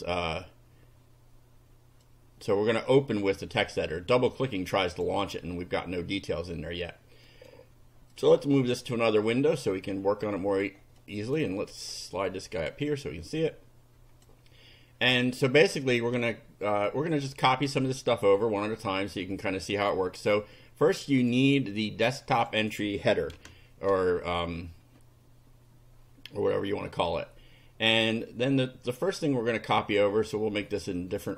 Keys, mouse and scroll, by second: 2.0 click, 4.9 click, 7.3 right click, 8.2 click, 9.3-10.8 drag, 11.0 click, 11.9-12.9 drag, 13.4-14.4 drag, 16.7-17.7 drag, 18.4 right click, 19.4 click, 19.8 click, 20.2 right click, 21.2 click, 22.4 click, 23.4 Return, 29.6-31.0 drag, 31.2 right click.